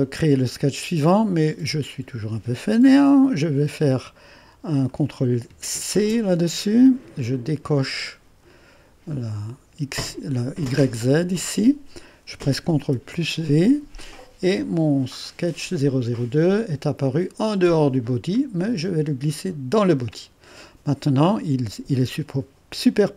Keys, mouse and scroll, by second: 1.0 click, 4.9 click, 6.0 ctrl+c, 7.7-8.8 drag, 11.0-12.3 drag, 13.0 ctrl+v, 16.5-19.4 drag.